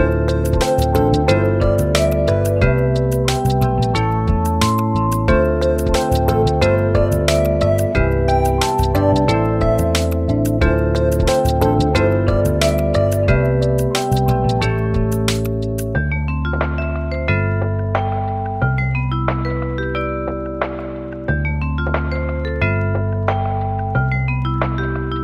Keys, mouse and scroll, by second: 0.0 right click, 0.5 click, 2.2-12.8 drag, 14.8 click, 15.4 right click, 15.9 click, 15.9 click, 16.5-22.7 alt+shift+drag, 22.9 click, 24.3 click, 24.3 click.